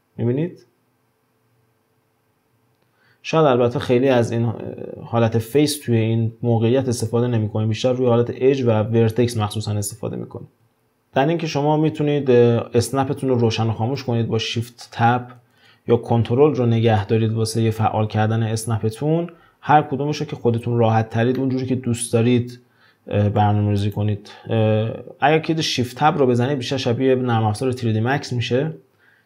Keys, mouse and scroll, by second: 10.8-12.1 shift+middle drag, 13.9 shift+Tab, 14.7 shift+Tab, 17.0 shift+Tab, 21.4-23.8 shift+middle drag, 23.8 click, 26.1 shift+Tab.